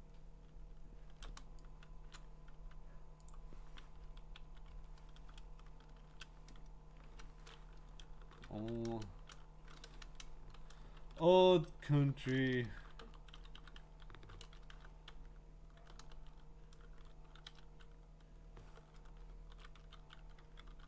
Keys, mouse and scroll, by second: 2.1 click, 2.6 t, 3.3 click, 4.4 Down, 5.5 scroll, 5.7 shift+Up, 6.0 `, 7.0 Return, 8.1-15.2 typing, 18.5-20.8 typing.